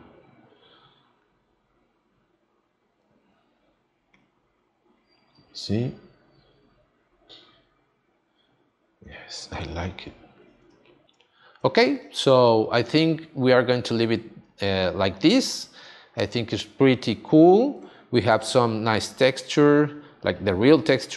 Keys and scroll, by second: 10.6 space, 11.6 space, 14.6 space, 17.8 space.